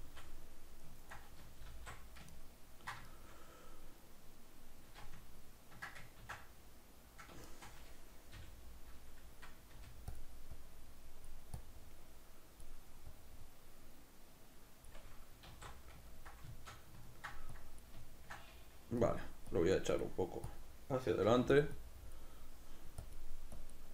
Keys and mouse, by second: 1.7 alt+q, 2.4 ctrl+middle click, 6.9 d, 7.5 shift+middle click, 8.4-10.3 middle drag, 8.4 g, 10.6-16.2 drag, 15.6 alt+q, 16.2-17.6 ctrl+middle drag, 17.6 click, 18.1-19.1 ctrl+middle drag, 19.1-21.7 drag, 21.3 f, 21.8-23.9 drag.